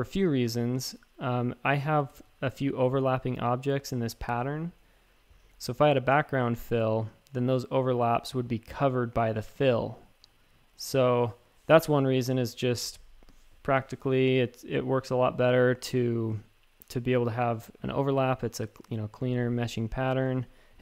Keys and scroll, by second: 2.1 shift+super+a, 10.9 v, 20.2-20.8 typing.